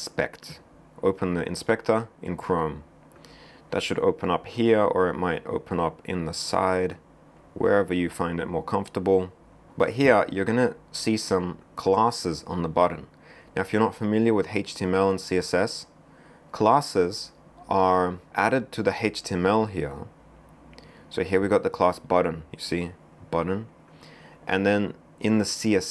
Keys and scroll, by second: 12.0 w.